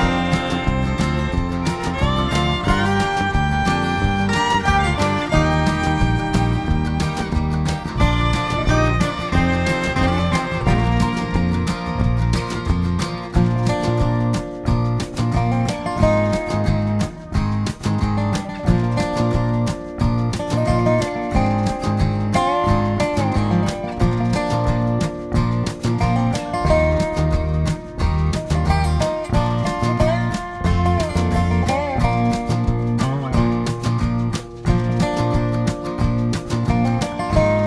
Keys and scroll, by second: 1.9 g, 12.2-12.6 Up, 12.9 Return, 14.2 ctrl+shift+[, 14.3 ctrl+], 18.8-20.0 typing, 21.9 ctrl+[, 22.2 ctrl+[, 27.8-28.5 typing, 29.6 ctrl+[, 29.9 ctrl+[, 34.2 ctrl+], 34.4 ctrl+], 34.9 ctrl+d, 36.5 ctrl+shift+].